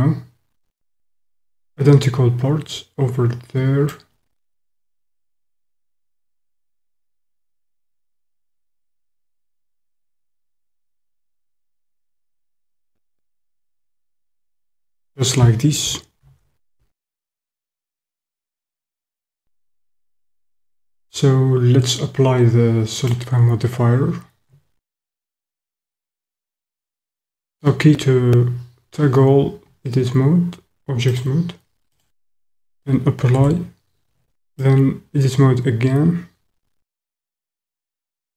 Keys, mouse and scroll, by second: 5.9 click, 8.1 click, 10.3 click, 11.9-13.1 middle drag, 14.0 middle click, 22.9-24.7 drag, 25.9 Tab, 33.4 Tab, 34.6-38.3 middle drag.